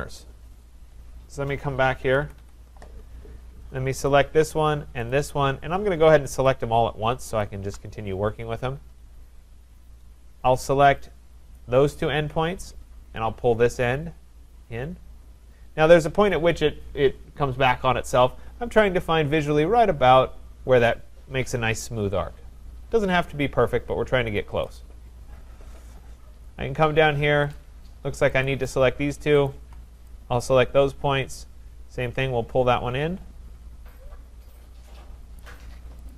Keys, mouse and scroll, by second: 0.6-1.5 scroll, 1.5-2.0 scroll, 2.0 Escape, 2.2 Escape, 2.4 Escape, 4.1 click, 5.2 shift+click, 6.5 click, 7.4 click, 9.6-10.1 scroll, 10.4-11.0 scroll, 11.0-11.3 scroll, 11.6 click, 24.6 click, 25.2-26.2 scroll, 26.3-27.6 scroll, 27.6 click, 28.4 click, 29.5 shift+click, 30.4 click, 35.4 click, 35.7 click, 36.1 click.